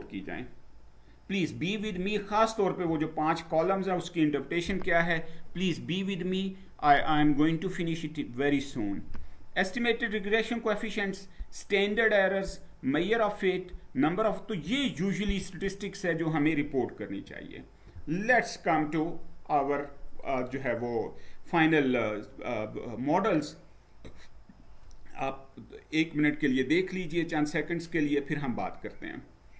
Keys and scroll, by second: 17.1 Down.